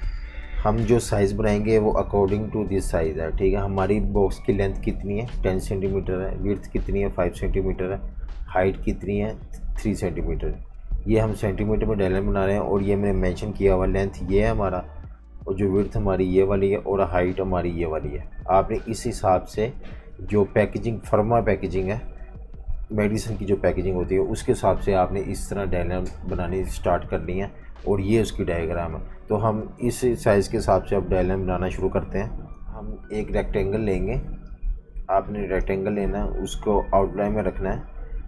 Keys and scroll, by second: 32.6 F19, 33.2 super+-, 33.4 super+-.